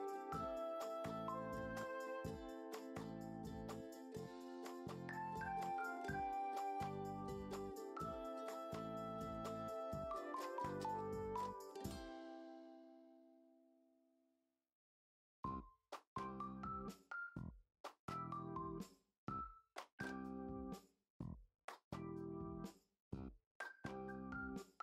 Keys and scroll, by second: 0.2 e, 0.4 ctrl+s, 1.9 ctrl+s, 3.9 s, 4.8 [, 4.8 [, 5.0-5.7 [, 8.1-8.4 ], 9.8 [, 10.2 ], 10.4 ], 11.4 ctrl+z, 12.4 ctrl+s, 12.7 p, 14.6-15.9 typing, 17.2-18.5 typing, 18.4 ctrl+z, 19.1 ctrl+d, 19.4 ctrl+alt+z, 19.6 ctrl+d, 20.0-20.7 typing, 21.0 ctrl+alt+z, 21.3 ctrl+j, 22.6 Return, 23.0 ctrl+s.